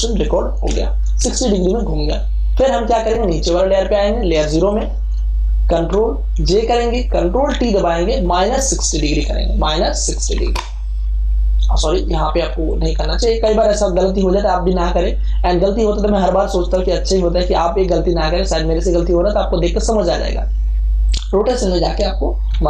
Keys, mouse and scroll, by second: 4.6 click, 6.4 ctrl+j, 7.4 ctrl+t, 8.7 click, 9.7 KP_Subtract, 12.6 click, 13.4 0, 21.1 click, 22.5 KP_Subtract.